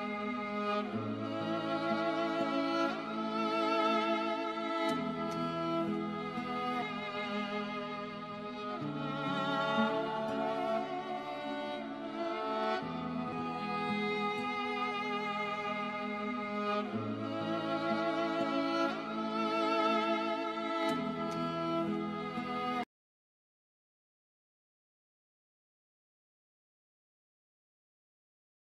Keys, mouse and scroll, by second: 1.2 KP_Subtract, 1.9 KP_5, 2.5 KP_Enter, 4.1 click, 5.3 KP_Subtract, 5.8 KP_1, 6.4 KP_Enter, 7.8 click, 8.3-9.0 scroll down 1, 9.2 alt+middle click, 10.9-11.3 scroll up 1, 13.7 scroll up 1, 14.4 right click, 15.9 click, 18.6-19.9 scroll down 1, 20.4-21.1 scroll up 1, 21.1 scroll down 1, 22.7 middle click, 26.2 click, 26.7-28.2 scroll up 1, 28.3 click.